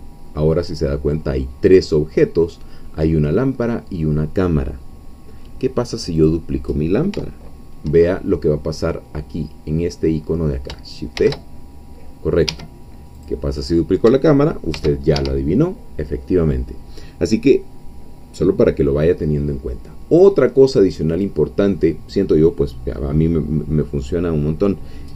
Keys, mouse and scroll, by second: 5.4 middle click, 6.2-7.2 drag, 11.2 shift+d, 12.5 Escape, 13.2-13.7 drag, 14.8 shift+d, 15.2 shift+Escape, 21.2 click.